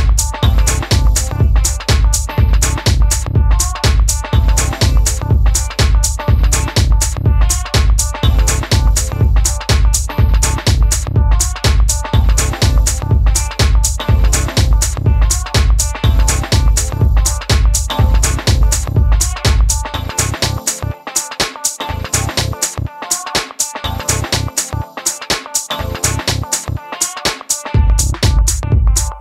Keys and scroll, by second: 0.7 super+c, 4.2 super+v, 6.9 Right, 10.3 Up, 19.1 super+v, 22.9 Up, 23.1 Up, 23.3 Right, 23.5 Left, 26.0 Right, 27.4 Left, 27.6 Left, 27.8 Down, 28.1 Down.